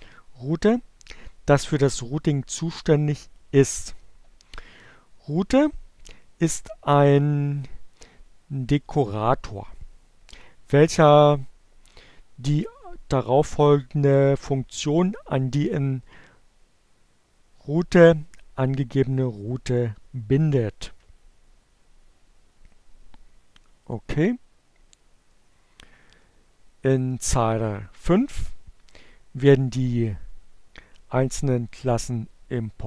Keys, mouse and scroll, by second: 22.1-23.3 drag, 32.3 click.